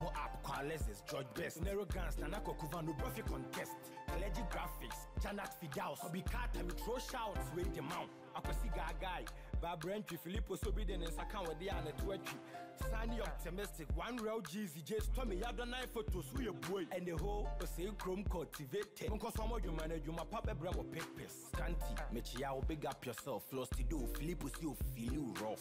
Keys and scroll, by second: 16.4 ctrl+d, 16.9 Right, 24.6 ctrl+-, 25.0 ctrl+0.